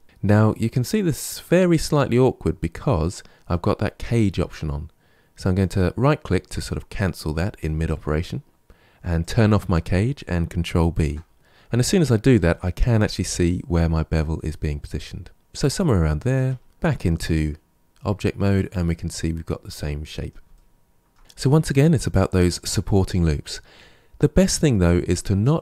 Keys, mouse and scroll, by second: 9.1 click, 10.8 ctrl+b, 16.7 Tab, 16.9-19.9 middle drag, 20.4-21.5 shift+middle drag, 23.6-25.6 middle drag.